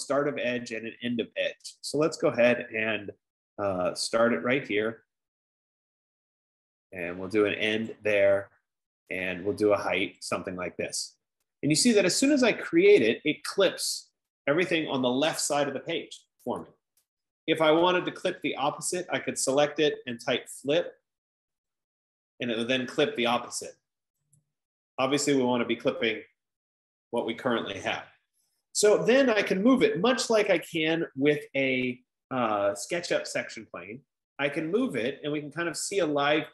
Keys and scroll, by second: 20.6-22.2 typing, 23.8-25.6 typing, 30.5-31.4 typing.